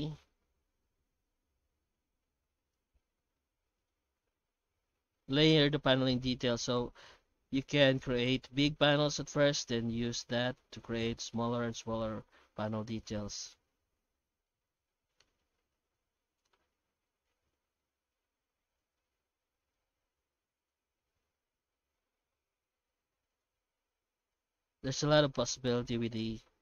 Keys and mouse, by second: 3.4-5.5 middle drag, 6.4 F9, 22.4 F9.